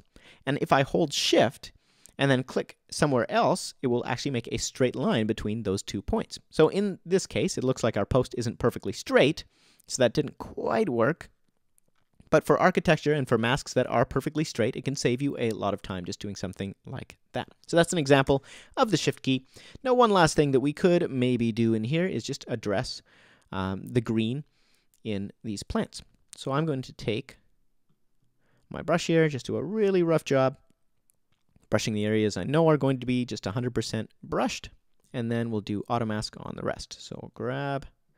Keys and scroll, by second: 18.2 BackSpace.